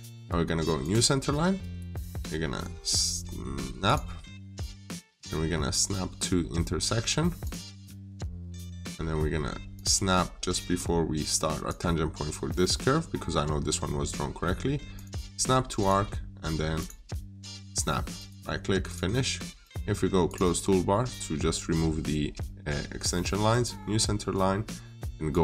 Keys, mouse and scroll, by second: 12.5 middle click, 14.8 click, 18.0 right click, 18.7 click, 19.5 right click, 20.1 click.